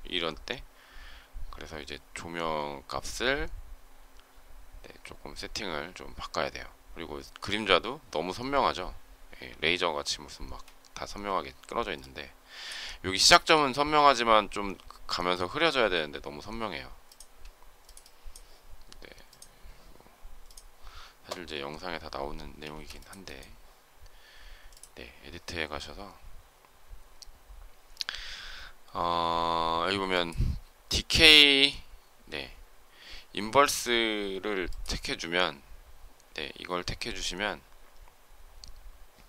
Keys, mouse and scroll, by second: 22.6 space.